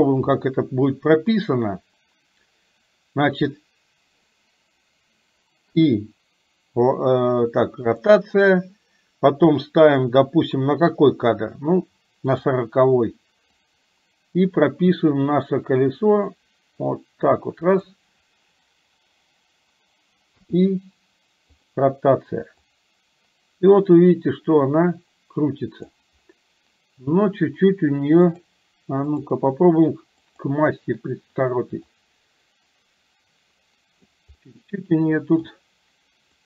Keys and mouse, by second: 1.5 click, 12.5 click, 13.6-18.0 drag, 22.7-26.1 drag, 28.5-30.6 drag, 32.1-34.3 drag, 34.5-35.6 middle drag.